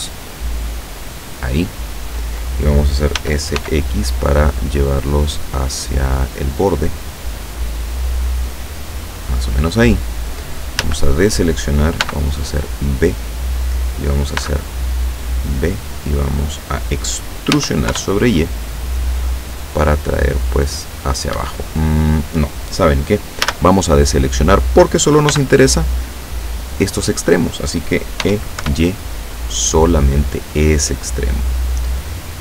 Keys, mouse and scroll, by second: 0.5 scroll up 2, 1.1 middle click, 3.3 s, 3.7 x, 9.1 click, 10.9 a, 12.1 b, 12.4 click, 14.5 b, 15.3 click, 17.6 e, 17.9 y, 21.4 Escape, 23.5 a, 25.3 b, 25.7-26.8 drag, 28.3 e, 28.7 y, 31.3 click.